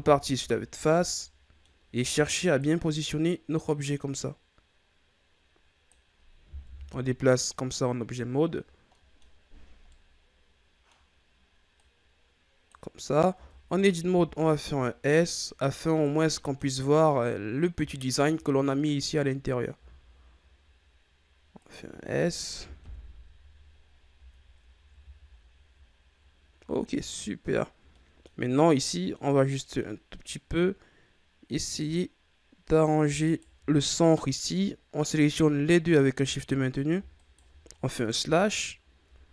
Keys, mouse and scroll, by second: 0.5-1.0 shift+scroll up 4, 1.0 middle click, 1.9 Tab, 2.3 right click, 3.5-6.5 drag, 6.5 KP_1, 7.7-8.9 scroll down 8, 8.9-9.3 middle drag, 9.3-9.8 scroll up 9, 9.8-11.7 middle drag, 11.7-13.3 drag, 13.3 Tab, 14.0 s, 16.2 middle click, 16.7-17.9 scroll up 4, 17.9-19.2 shift+scroll up 3, 19.7 s, 21.9-22.7 scroll down 3, 22.7 KP_1, 23.7-24.1 scroll down 6, 24.1 Tab, 24.5-24.9 scroll down 2, 24.9 a, 25.3-26.7 scroll down 4, 26.7-27.5 scroll up 2, 27.5 ctrl+scroll up 4, 27.8-28.3 middle drag, 28.3-28.8 scroll up 6, 28.8-29.4 middle drag, 29.4 right drag, 29.7-31.4 middle drag, 31.4 right click, 32.6 right click, 33.2 shift+right click, 35.8 right click, 36.5 right click, 37.1 shift+right click, 38.1 KP_Divide, 38.9 KP_3.